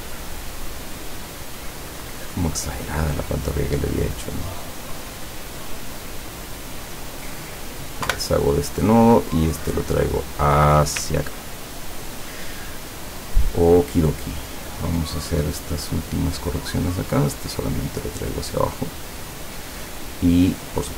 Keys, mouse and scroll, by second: 1.8 click, 3.4-6.2 drag, 6.5 click, 7.4 click, 8.1 Delete, 9.0-10.6 drag, 11.4-12.0 ctrl+scroll down 4, 12.9 ctrl+scroll up 2, 13.7 ctrl+scroll up 2, 16.6 click, 17.6-19.5 drag.